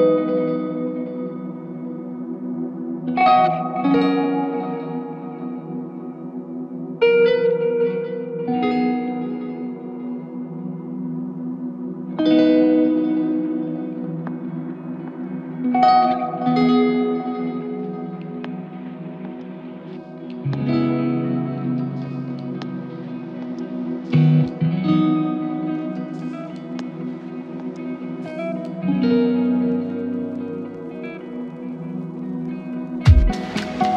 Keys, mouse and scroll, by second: 9.4 alt+click, 19.1 alt+click, 20.7 alt+click, 26.8 alt+click, 32.4 alt+click.